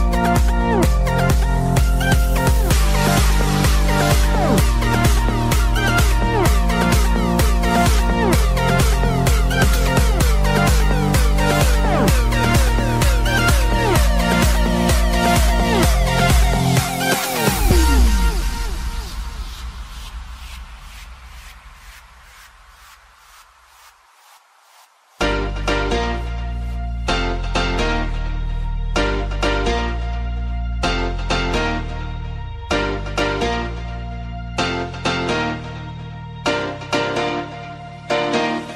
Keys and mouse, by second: 2.8 click, 3.6 click, 4.6 click, 6.6 click, 12.5 click, 13.2 click, 17.3 click, 23.3 click, 24.9 ctrl+click, 26.7 click, 30.0 click, 34.5 click.